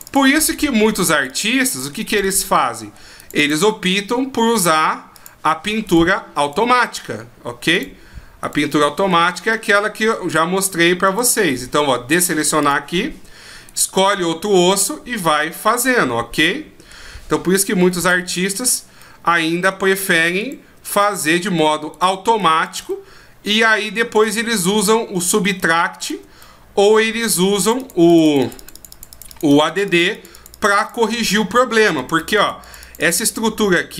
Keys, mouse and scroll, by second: 0.0 click, 0.4 middle click, 1.1 click, 1.3 click, 1.6 middle click, 2.1 click, 2.2 click, 2.5 middle click, 3.2 click, 3.4 click, 5.1 click, 5.8 right click, 6.4 right click, 7.7 click, 8.4 right click, 9.5 middle click, 11.0 right click, 12.6 click, 13.7 right click, 14.7 middle click, 16.3 middle click, 18.0 click, 19.0 middle click, 20.4 shift+right click, 21.1 middle click, 21.9 shift+right click, 22.5 shift+right click, 22.9 middle click, 24.1 shift+right click, 24.5 middle click, 26.0 shift+right click, 26.4 middle click, 27.6-28.4 click, 28.0 click, 28.1 click, 28.6 click, 28.7 click, 28.9 click, 29.1 click, 29.3 click, 29.5 click, 29.7 click, 29.9 click, 30.1 click, 30.3 click, 30.5 click, 30.8 click, 31.1 middle click, 31.8 click, 31.9 click, 32.2 click, 32.4 click, 32.6 click, 32.8 click, 33.0 click, 33.3 middle click.